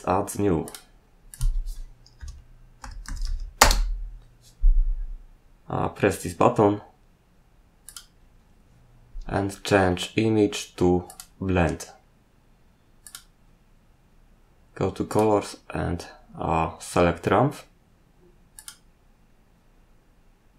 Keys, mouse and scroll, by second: 0.6 click, 1.3 click, 2.1-3.7 typing, 7.8 click, 11.0 click, 13.0 click, 15.1 click, 18.5 click, 19.8-20.5 scroll down 1.